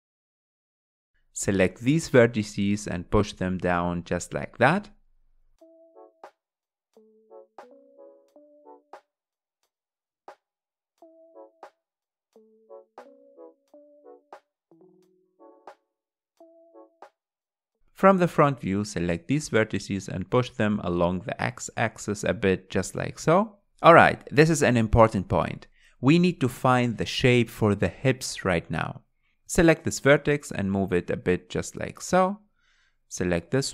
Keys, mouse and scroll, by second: 0.9 click, 2.6 click, 6.0 click, 6.2 click, 6.8 g, 7.9 click, 8.1 g, 9.5 click, 9.7 click, 9.8-15.6 typing, 10.2 click, 10.3 click, 11.0 click, 13.3 click, 13.9 click, 14.7 click, 15.5 click, 16.8 middle click, 17.3 KP_1, 17.7 scroll up 2, 17.9 alt+z, 18.2 shift+middle click, 19.0 click, 20.2 click, 21.9 r, 24.0 g, 25.6 click, 26.1 g, 27.4 click, 27.6 g, 29.0 click, 29.2 g, 30.5 click, 30.7 g, 31.8 click, 31.9 g.